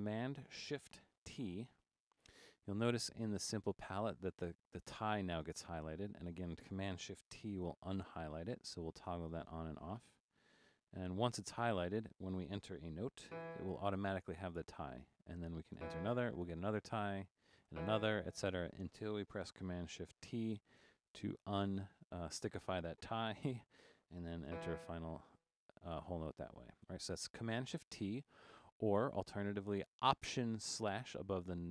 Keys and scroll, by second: 1.6 shift+super+t, 7.5 shift+super+t, 10.7 shift+super+t, 13.4 e, 15.9 e, 20.6 shift+super+t, 24.5 e.